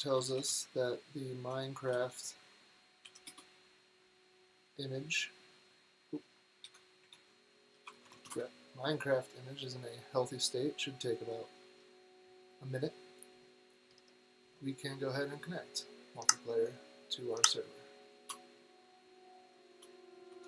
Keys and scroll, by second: 0.0-3.6 typing, 6.0-8.7 typing, 10.0-10.7 typing, 13.6 typing, 16.0 typing, 18.0-20.4 typing.